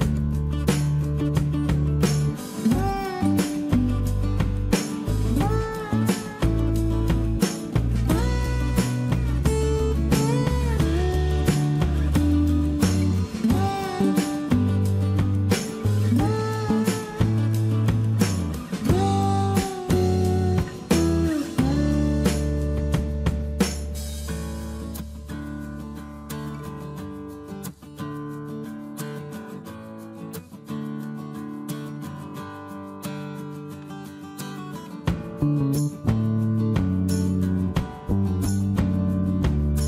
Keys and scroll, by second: 3.4-4.2 typing, 4.3 Return, 8.2-8.9 typing, 12.8-13.8 typing, 14.9 space, 17.1 Escape, 21.5 t, 28.1-29.3 typing, 37.6-38.7 typing.